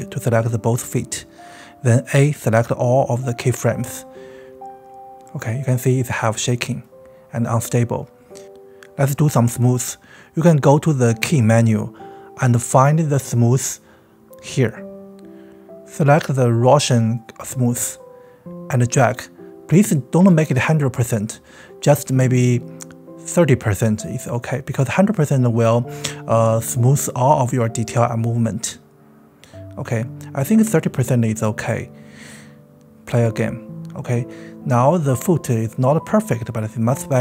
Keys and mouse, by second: 0.1 shift+click, 3.9-6.5 drag, 7.5-8.9 middle drag, 8.9-17.8 drag, 28.2 drag, 29.1-29.7 drag, 29.9 space.